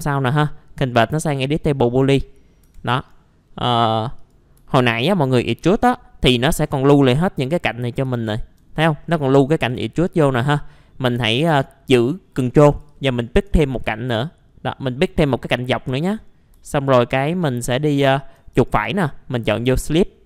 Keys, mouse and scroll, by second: 1.2 click, 2.0 middle click, 2.6 F4, 2.9 right click, 4.1 click, 4.7 alt+middle click, 5.2-6.3 scroll up 2, 6.3 scroll up 1, 6.6 alt+middle click, 8.1 alt+middle click, 8.9-11.1 scroll up 1, 12.6 ctrl+click, 12.9 ctrl+click, 13.4-13.8 scroll down 1, 15.9 middle click, 16.0-16.3 scroll down 1, 16.6 alt+middle click, 17.6 scroll up 1, 17.9 alt+middle click, 18.5 right click, 19.8-20.2 drag.